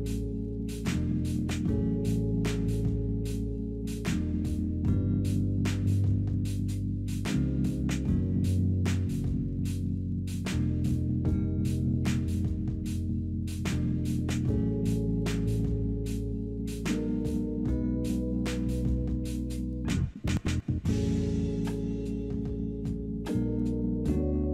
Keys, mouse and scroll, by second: 5.3 middle click, 8.6 middle click, 9.7 shift+f.